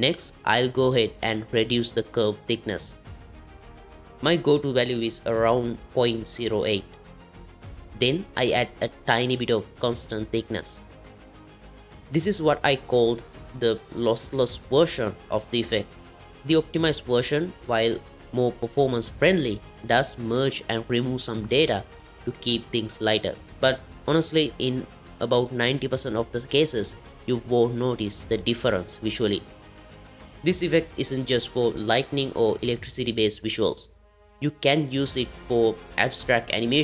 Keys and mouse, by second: 2.3 click, 4.7-6.8 drag, 8.6-10.7 drag, 17.5 click, 20.8-21.8 drag, 22.8-24.3 drag, 22.8-24.3 middle drag, 27.6-30.0 drag, 31.1 click, 36.7 click.